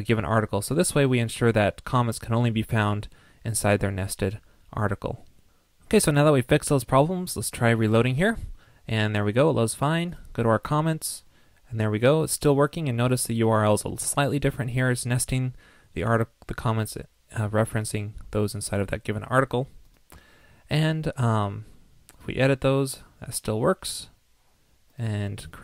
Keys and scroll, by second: 1.0 super+s, 7.8 super+r.